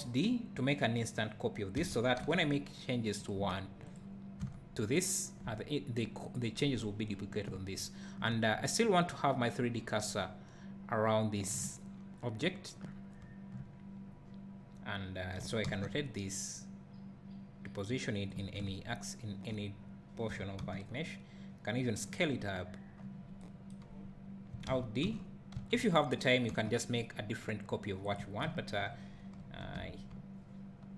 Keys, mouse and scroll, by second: 1.8 alt+d, 3.2 click, 4.4 Tab, 6.3 click, 7.5 `, 15.4 r, 18.4 click, 20.3 s, 24.7 alt+d, 28.2 click, 28.5 `, 29.6 KP_Decimal.